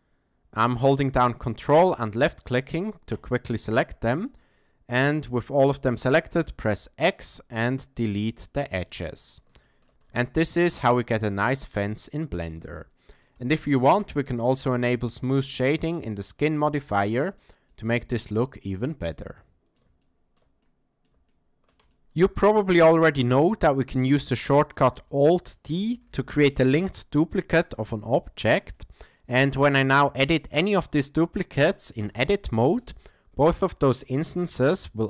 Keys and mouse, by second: 1.4-1.8 ctrl+drag, 4.3 shift+click, 6.4 x, 9.6 shift+middle click, 10.1 ctrl+a, 10.3-10.7 ctrl+middle drag, 11.0-11.8 middle drag, 12.0-12.5 shift+middle drag, 12.7-13.2 middle drag, 13.5 shift+middle click, 15.8-16.4 drag, 17.0-17.4 ctrl+middle drag, 17.7-19.8 middle drag, 20.0-20.4 ctrl+middle drag, 20.6-21.0 middle drag, 21.3-21.7 shift+middle drag, 21.9 ctrl+middle click, 22.5-23.1 ctrl+middle drag, 23.4-23.7 shift+middle drag, 23.9-24.3 middle drag, 25.1-25.4 shift+middle drag, 26.1 alt+d, 28.3 shift+middle click, 28.7 middle click, 32.0 Tab, 34.3 s.